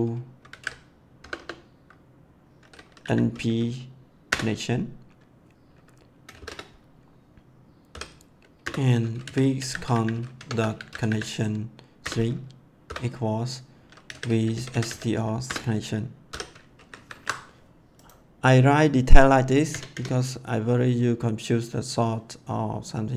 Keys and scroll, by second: 0.0-1.1 typing, 3.0 n, 3.3 p, 4.2 Return, 6.3 shift+9, 7.4 shift+0, 7.9 ;, 8.5 Return, 8.9-11.5 typing, 11.9 Return, 12.8-16.2 typing, 15.4 Return, 16.7 ctrl+s, 19.7 Return.